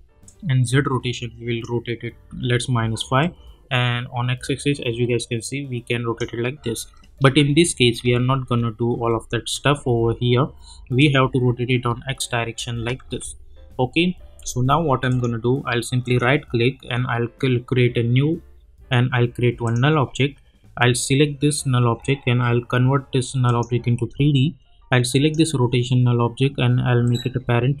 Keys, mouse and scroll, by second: 0.2-7.4 drag, 7.4 ctrl+z, 11.0-13.0 drag, 13.0 ctrl+z, 14.4 u, 15.1 click, 16.0 right click, 19.6 click, 23.4-27.8 drag.